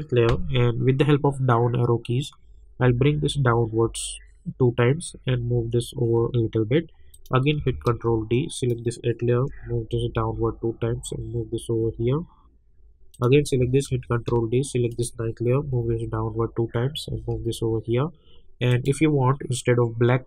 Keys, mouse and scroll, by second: 2.4 Down, 5.1 Right, 7.1 click, 7.9 ctrl+d, 8.5 click, 9.5 Down, 10.9 Right, 13.1 click, 13.8 ctrl+d, 14.9 click, 15.6 Down, 17.1 Right, 18.7 click.